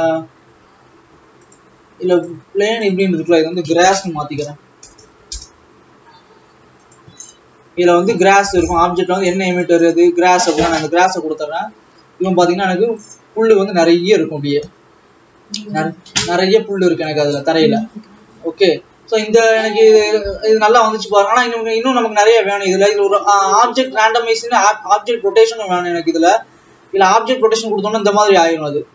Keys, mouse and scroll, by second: 5.3 s, 7.0 click, 10.8 click, 11.5-12.6 scroll up 8, 12.6 alt+a, 13.3 Left, 17.9-18.8 scroll down 6, 18.8-19.5 scroll down 2, 19.7 click, 23.2-23.8 scroll up 5, 24.1 Left, 25.9 click, 27.2-27.6 scroll down 2, 28.4-28.9 drag.